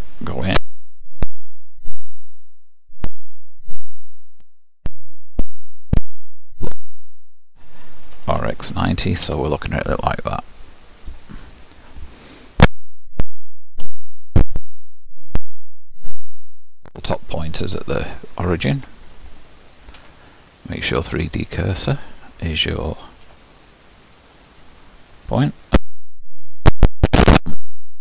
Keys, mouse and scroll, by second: 1.7 KP_7, 2.9 KP_1, 4.9 KP_5, 6.1 KP_Divide, 8.3 r, 13.1 g, 14.8 g, 17.9-20.9 shift+middle drag, 20.9 ., 24.5 ., 25.0-25.7 scroll down 1, 25.7 scroll down 1, 26.0 s.